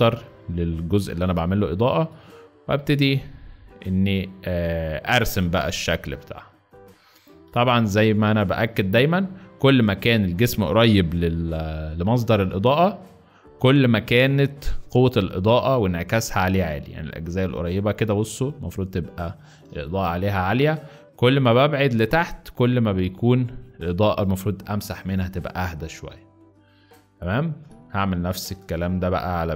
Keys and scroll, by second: 0.9 b, 11.2-12.3 typing, 22.2 x, 25.5 z, 28.5 space.